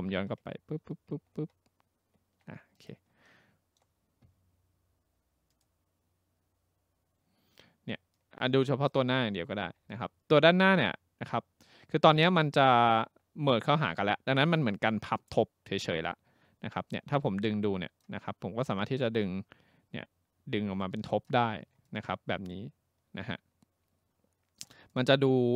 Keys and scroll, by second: 0.0 ctrl+z, 0.2 ctrl+z.